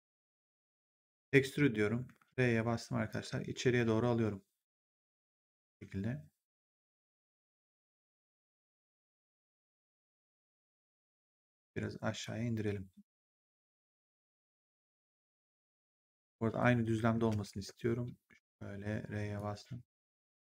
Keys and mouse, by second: 1.3 click, 11.4 w, 12.1 click, 17.2 ctrl+z, 19.3 click, 20.4 w.